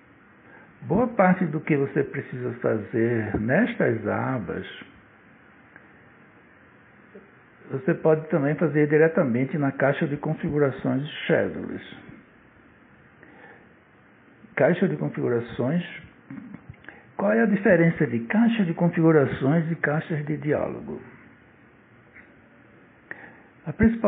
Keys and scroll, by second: 15.6 Escape.